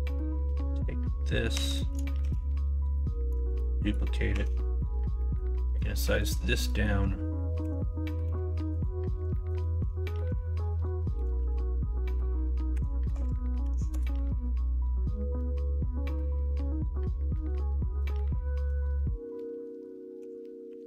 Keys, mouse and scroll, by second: 0.3 Tab, 1.5 Tab, 1.7 middle click, 2.1 shift+s, 3.4 shift+d, 4.3 Tab, 4.5 middle click, 5.2 middle click, 5.5 middle click, 6.0 middle click, 6.6 middle click, 7.6 s, 8.2 a, 9.3 middle click, 11.0 s, 16.4 middle click, 17.2 middle click, 18.5 ctrl+z, 18.9 middle click, 20.1 s.